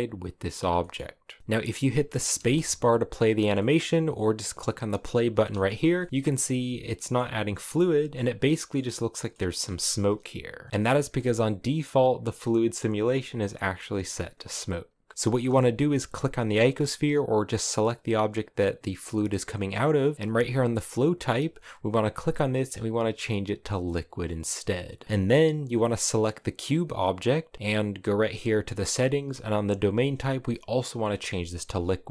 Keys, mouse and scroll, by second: 0.6 shift+middle click, 0.7-1.4 scroll down 1, 1.4 middle click, 2.0 space, 3.4 middle click, 4.2 click, 5.2-7.9 shift+middle drag, 7.9 click, 8.2-10.4 shift+middle drag, 10.4 space, 10.7-14.3 shift+middle drag, 14.3-15.8 right drag, 15.8 g, 25.4-31.6 right drag, 31.6-32.1 drag.